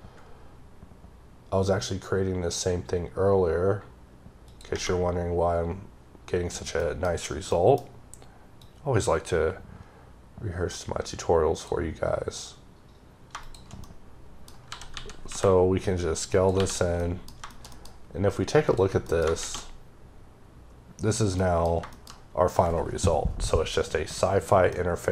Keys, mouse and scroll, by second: 4.4 click, 6.7 middle click, 7.4 middle click, 8.5 click, 13.7 middle click, 14.6 s, 16.2 click, 16.4 h, 16.6 scroll down 2, 16.8 scroll up 1, 16.9 middle click, 17.1 scroll down 1, 17.3 scroll, 17.5 shift+middle click, 17.6 shift+double middle click, 18.5 click, 18.9 middle click, 21.3 middle click, 24.6 middle click.